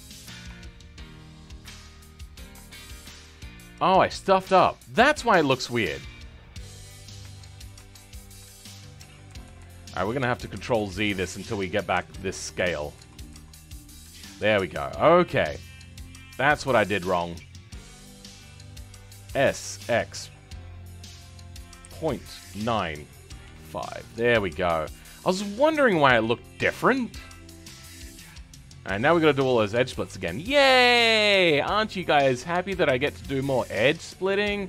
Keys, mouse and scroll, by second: 1.5-1.8 scroll down 2, 1.8-7.1 middle drag, 7.1 ctrl+z, 7.7 ctrl+z, 10.0 ctrl+z, 14.6-15.7 scroll up 4, 15.7-17.3 middle drag, 17.3 shift+click, 17.8-19.3 scroll down 6, 19.3 s, 24.4-25.2 scroll up 2, 25.2-27.2 middle drag, 27.2-27.6 scroll down 2, 27.6 Tab, 27.8-28.8 middle drag, 28.8 Tab, 29.1-29.4 scroll up 1, 29.4-30.7 shift+middle drag, 30.7-32.4 alt+drag, 32.8-33.1 scroll up 2, 33.1-34.6 shift+middle drag.